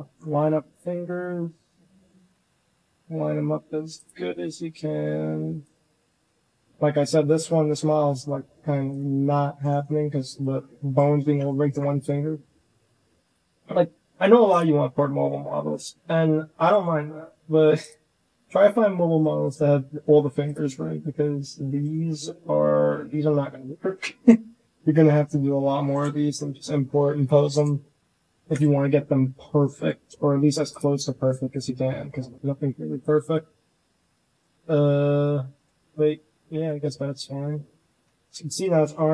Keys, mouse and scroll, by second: 0.5 g, 1.0-1.5 drag, 2.0 shift+middle click, 2.4 r, 4.1 s, 5.9 shift+middle drag, 6.8-7.1 middle drag, 7.7-8.1 middle drag, 8.8 click, 9.3 drag, 9.3 middle drag, 9.8 r, 10.5-10.8 drag, 10.5-10.8 middle drag, 11.2 shift+click, 11.3 middle drag, 11.5 shift+middle drag, 11.8 click, 12.2 r, 13.7 drag, 14.4 click, 14.7 shift+click, 15.2 r, 15.9 g, 16.8-17.2 drag, 17.4 s, 17.9-18.3 drag, 18.4 r, 19.2 drag, 19.6 r, 20.5-20.9 drag, 21.3 g, 22.3 click, 22.9 g, 24.7 g, 26.1 g, 28.3 KP_1, 29.1-29.7 drag, 30.6 click, 31.8 drag, 32.0-32.6 middle drag, 33.2 click, 33.4 middle click, 33.7 g, 34.1 middle click, 34.4 g, 35.0 s, 36.4 KP_1, 37.7 shift+drag.